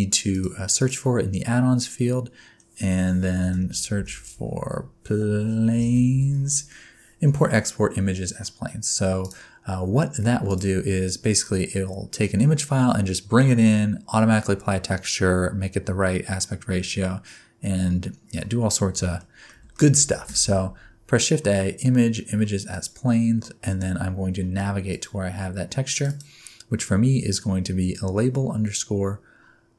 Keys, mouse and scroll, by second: 19.2 shift+middle click, 19.7 shift+middle click, 20.3 shift+a.